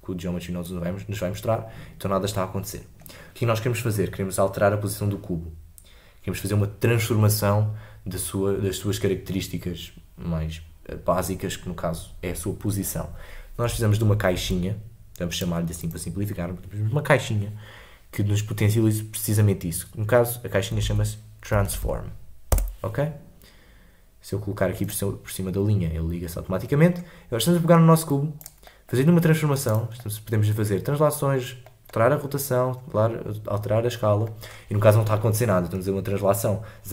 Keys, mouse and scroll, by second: 28.1-36.9 drag.